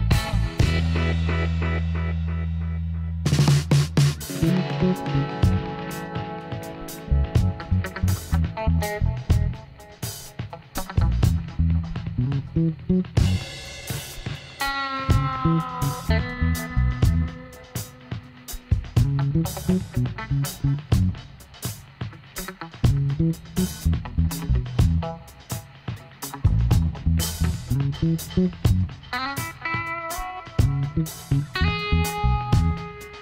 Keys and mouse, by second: 0.1 r, 1.5 s, 3.4-5.2 drag, 5.2 s, 6.3 middle click, 7.1-8.7 drag, 7.8 g, 9.6 s, 11.5 click, 12.4 click, 13.2 g, 15.8-17.5 drag, 25.6 KP_1, 26.9 KP_7, 28.1-29.8 drag, 29.6 g, 30.7-32.5 right drag, 31.0 g, 32.7-33.2 right drag, 32.9 g.